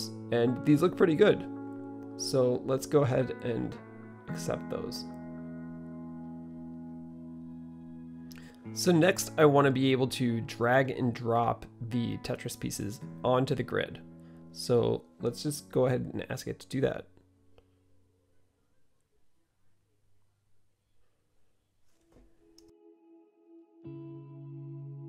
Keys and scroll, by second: 18.6-25.0 typing.